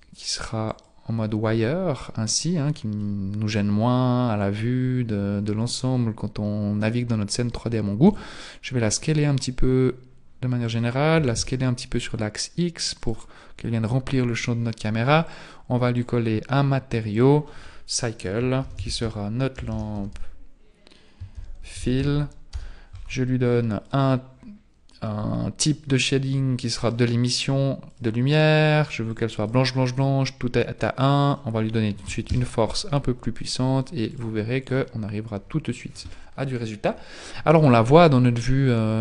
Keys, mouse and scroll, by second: 3.0 middle click, 5.4-5.8 scroll up 1, 5.8-6.2 scroll down 1, 6.2-8.0 scroll down 3, 8.0 s, 11.2 s, 15.2 click, 16.0 click, 17.1 click, 19.7 BackSpace, 22.1 l, 23.8 click, 27.9 click, 31.2 click, 34.1 click.